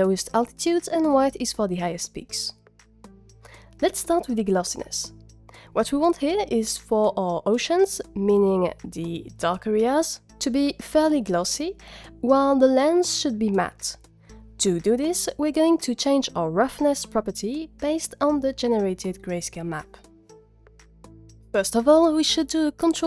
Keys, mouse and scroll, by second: 21.9 click, 22.3 ctrl+shift+click.